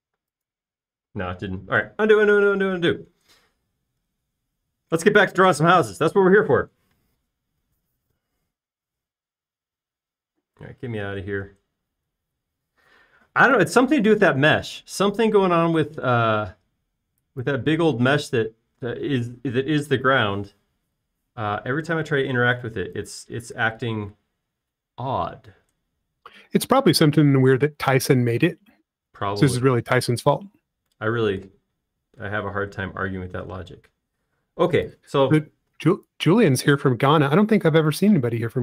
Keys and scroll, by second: 1.2 space, 3.0 super+z, 3.2 super+z, 3.5 super+z, 3.6 super+z, 3.9 super+z, 4.6 space, 24.1 super+z, 28.6 super+z, 29.4 super+z, 30.3 super+z, 33.9 super+z, 34.4 super+z, 36.5 space.